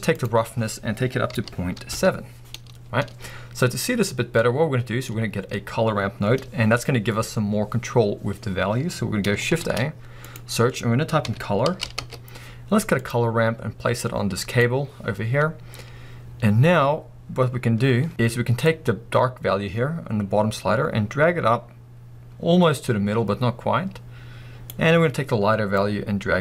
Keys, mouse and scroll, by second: 2.1 Return, 13.1 middle click, 13.1 shift+a, 14.8 click, 16.3-16.7 scroll up 1, 18.8-26.4 drag.